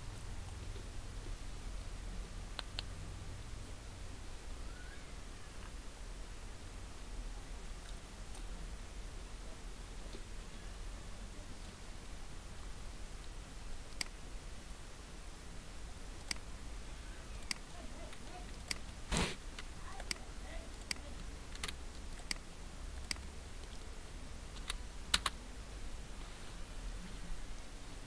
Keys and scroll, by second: 21.5 ctrl+c, 24.5 ctrl+v, 25.1 ctrl+Return.